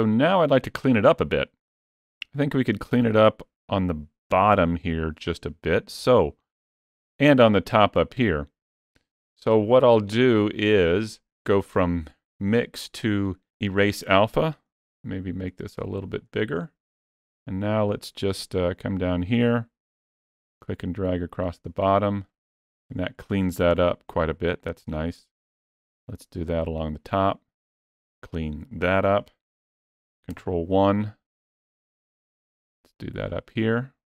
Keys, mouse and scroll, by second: 4.1 KP_1, 11.3 click, 14.5 f, 20.1 click, 25.2 click, 30.1 ctrl+KP_1, 33.1 click.